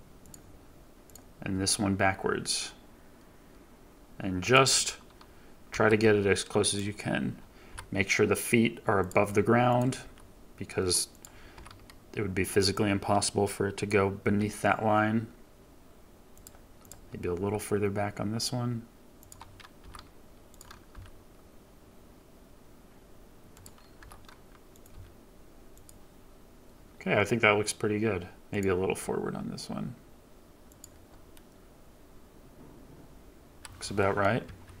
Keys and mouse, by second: 1.5 g, 4.4 click, 5.6 r, 7.6 g, 8.9-9.9 drag, 9.9 g, 11.5 r, 14.1 g, 16.3 click, 17.3 g, 19.7 r, 20.8 g, 23.5 click, 23.9 r, 24.8 g, 28.5 click, 28.8 g, 30.6-31.0 middle drag, 33.9-34.8 middle drag, 34.4 KP_3.